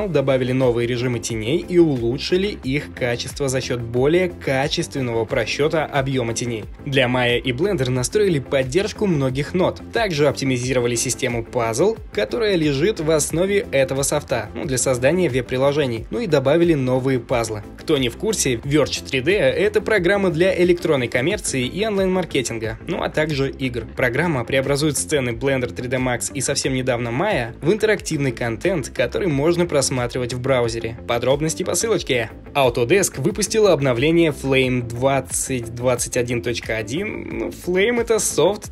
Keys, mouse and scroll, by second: 0.4 right click, 1.4-2.5 drag, 2.9 shift+middle click, 4.2-5.4 middle drag, 5.8-8.7 middle drag, 9.3-10.6 middle drag, 11.0-12.2 middle drag, 11.8 alt+h, 12.3 right drag, 13.0 shift+middle drag, 13.0 ctrl+s, 13.9 middle click, 14.0 middle click, 15.8-16.5 shift+middle drag, 17.4 shift+middle click, 17.8 middle click, 18.0 right click.